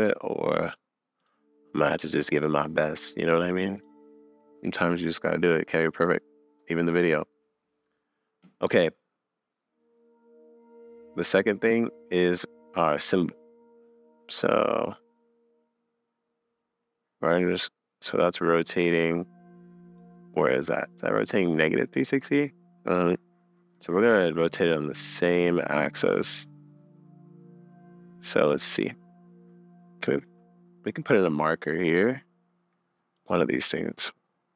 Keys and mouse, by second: 0.7 click, 1.2 click, 1.9 click, 3.8 click, 12.9 click, 14.4 click, 15.3 click, 17.6 middle click, 19.0 click, 19.3 middle click, 19.9 click, 21.2 click, 23.7 click, 30.2 Up, 31.6 click, 33.4-34.5 drag.